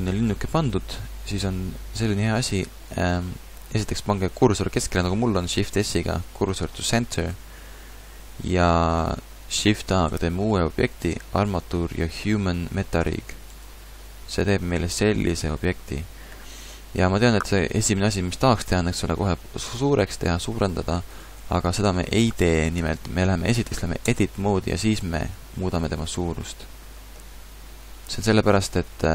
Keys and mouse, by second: 5.5 shift+s, 10.1 shift+a, 15.2 KP_Decimal, 19.1 s, 24.1 Tab, 24.7 a, 25.0 a, 25.9 s, 27.3 z, 28.1-29.1 drag.